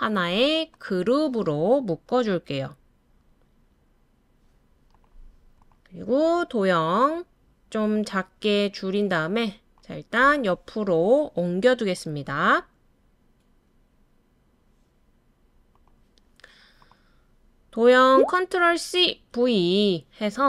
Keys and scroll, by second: 18.7 super+c, 19.1 super+v.